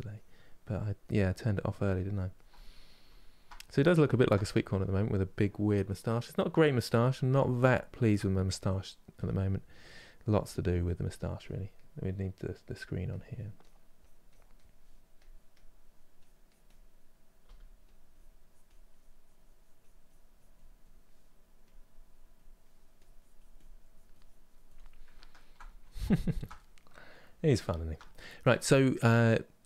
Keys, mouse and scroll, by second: 0.3-1.5 middle drag, 1.5 click, 2.2-8.8 middle drag, 8.8 f, 10.0-14.9 drag, 15.2 click, 17.1 f, 17.7-21.4 drag, 21.5 click, 22.6-24.8 drag, 24.8-29.6 ctrl+middle drag.